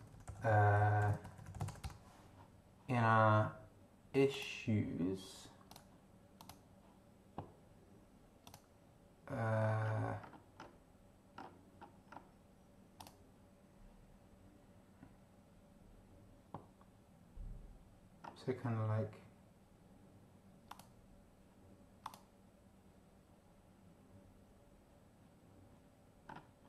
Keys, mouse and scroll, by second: 0.0-1.6 typing, 1.8 Return, 4.3 click, 5.7 click, 6.4 click, 8.4 click, 9.8-10.8 scroll down 5, 11.4 scroll down 2, 12.1 scroll down 2, 13.0 click, 18.2 scroll down 2, 20.7 click, 22.0 click, 26.3-26.6 scroll up 4.